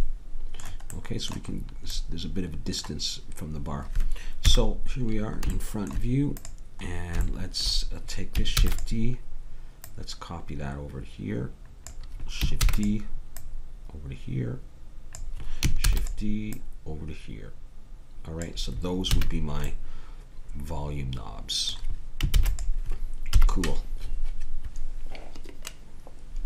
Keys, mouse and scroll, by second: 0.0 a, 4.5 KP_1, 6.3-8.1 drag, 8.6 shift+d, 12.6 shift+d, 13.3-15.4 drag, 15.9 shift+d, 16.5 click, 18.3 click, 19.1 a, 22.3 ctrl+s, 23.3 KP_1.